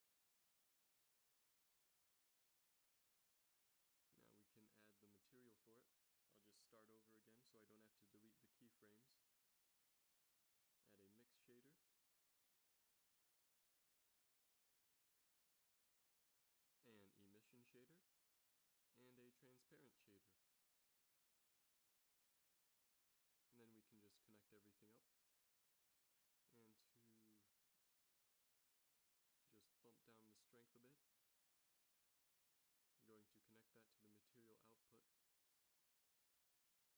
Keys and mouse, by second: 9.9 x, 10.3 shift+a, 15.8 shift+a, 19.2 shift+a, 22.5 f, 24.7 f.